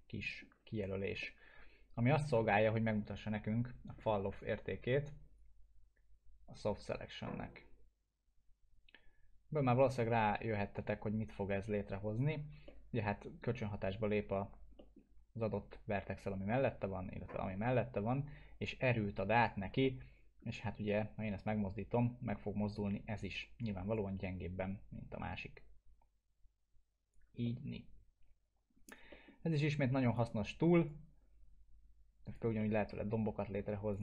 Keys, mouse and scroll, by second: 1.2-2.4 alt+middle drag, 5.4-12.2 drag, 12.6-13.6 alt+middle drag, 19.6-20.4 alt+middle drag, 23.9-27.4 alt+middle click, 27.4-29.0 alt+middle drag, 30.1-32.4 drag, 32.6 middle click, 33.9 click.